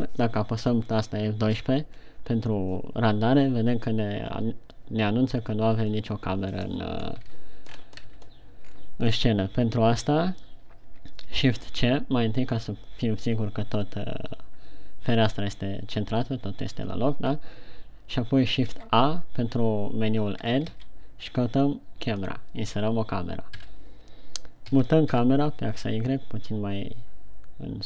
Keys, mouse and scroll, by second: 2.0 F12, 7.4-7.8 scroll down 1, 7.8 a, 8.4-8.9 scroll up 3, 8.9 a, 9.2-9.6 scroll down 6, 12.1 shift+c, 19.1 shift+a, 21.3 shift+a, 24.0 KP_3, 25.1 g.